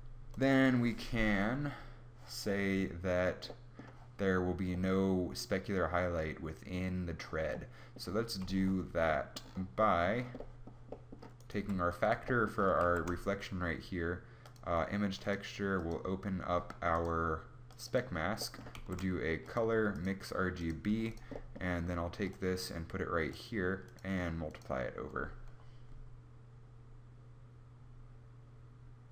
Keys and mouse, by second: 11.2 g, 12.4 shift+a, 18.4 shift+a, 20.6 g.